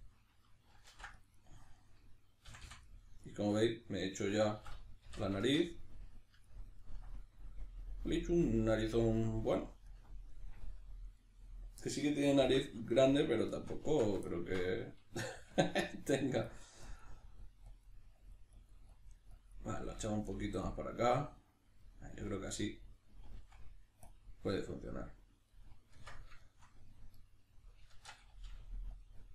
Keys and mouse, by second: 0.9 ctrl+r, 1.8 right click, 2.5 f, 2.9-14.2 middle drag, 4.6 a, 5.1 shift+n, 12.4 alt+q, 13.8 Tab, 15.6 click, 21.0 middle click, 24.1 click, 24.7 middle click, 25.9 b, 26.4 shift+middle click, 27.1 right click, 27.9 shift+Tab, 29.0 click.